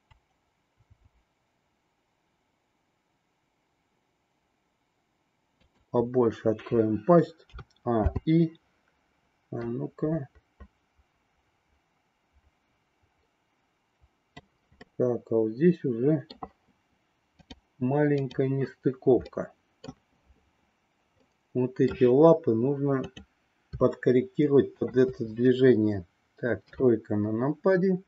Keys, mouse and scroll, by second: 0.8 r, 7.4 a, 8.0 i, 9.7-14.4 drag, 15.0-16.4 middle drag, 17.4 click, 18.1 click, 19.2 middle click, 21.2 middle click, 23.0-24.3 drag, 24.7-25.9 shift+drag, 26.7 KP_3.